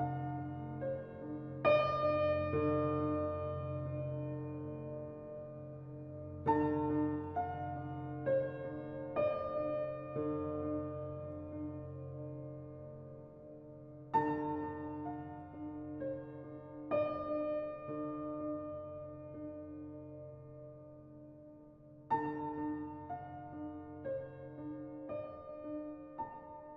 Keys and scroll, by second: 10.7 typing, 16.8 typing, 23.1 typing.